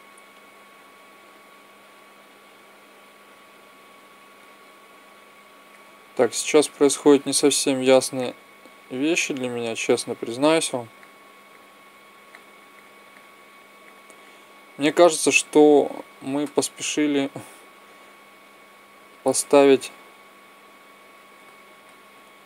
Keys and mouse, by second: 0.6-2.3 drag, 8.3-16.0 drag, 19.6 z.